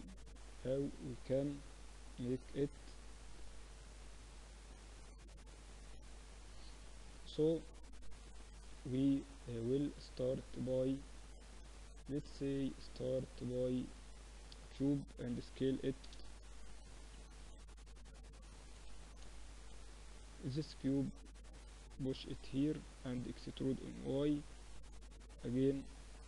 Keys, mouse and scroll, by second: 1.1 KP_3, 3.7-8.2 middle drag, 8.2-9.9 drag, 8.7 shift+a, 15.1 s, 16.7-18.3 middle drag, 17.3 Tab, 18.3 click, 18.5-20.2 typing, 22.5 click, 23.0 e, 25.6-26.2 drag.